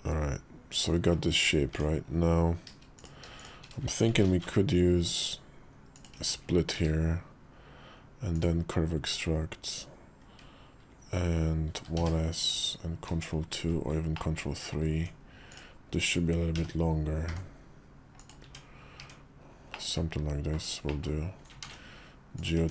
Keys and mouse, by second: 1.5 Tab, 2.7 click, 4.0 ctrl+shift+b, 5.9 Tab, 6.5 q, 12.9 ctrl+2, 13.4 ctrl+3, 14.0 middle click, 14.7 Tab, 15.2 click, 16.3 g, 18.2 Tab, 18.8 Tab, 19.5 middle click, 20.6 middle click, 21.4 ctrl+a, 22.3 Tab.